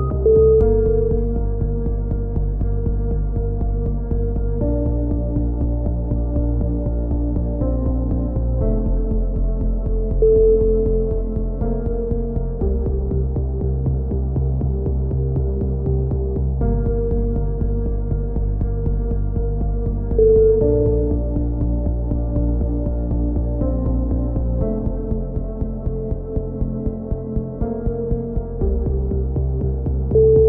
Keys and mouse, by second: 4.6-5.6 drag, 6.2-7.3 middle drag, 7.5-9.4 middle drag, 7.9 a, 8.3 z, 9.4 click, 13.1 KP_1, 13.4 click, 13.6 z, 16.6 z, 18.2-19.2 drag, 19.6-21.1 right drag, 20.9 KP_7, 21.4 right click, 22.1 click, 22.1 z, 23.0 s, 28.0 a, 28.3 z, 28.6-29.6 drag.